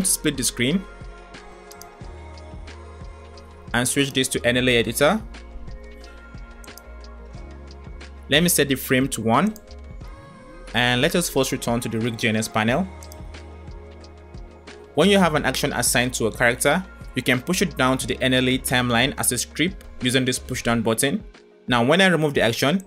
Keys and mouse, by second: 1.5 click, 2.7 click, 9.3 click, 12.9 click.